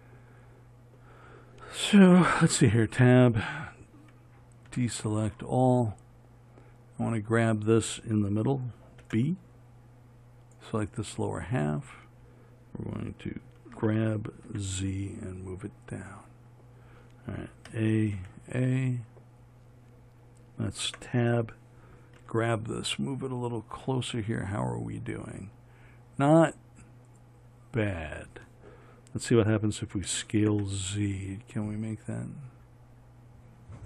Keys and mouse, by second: 2.6 Tab, 5.0 a, 9.3 b, 14.0 g, 18.0 a, 21.1 Tab, 22.5 g, 30.4 s.